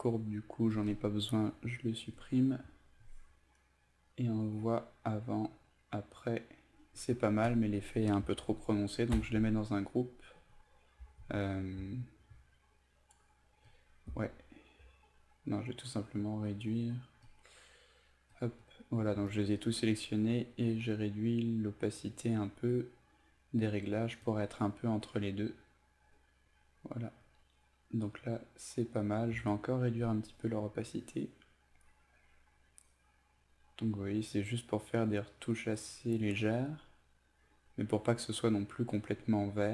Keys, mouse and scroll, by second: 1.5 Delete, 4.0-6.8 drag, 7.5 shift+click, 9.2 ctrl+g, 11.2 ctrl+alt+z, 13.7 shift+click, 15.8 click, 19.3 shift+click, 20.0-22.4 drag, 29.7 shift+click, 30.4-39.2 drag.